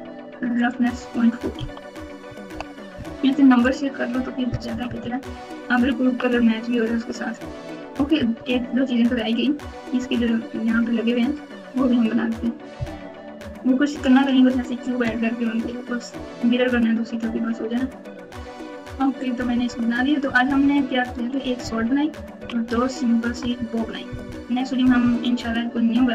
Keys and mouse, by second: 0.5-2.4 drag, 4.6-6.1 typing, 7.9 KP_4, 8.1 KP_4, 8.3 KP_4, 18.9 KP_Multiply, 18.9-22.3 typing, 22.5 KP_Subtract, 22.8 KP_Subtract, 23.3 KP_Add, 23.5 KP_Add, 24.0-26.1 typing.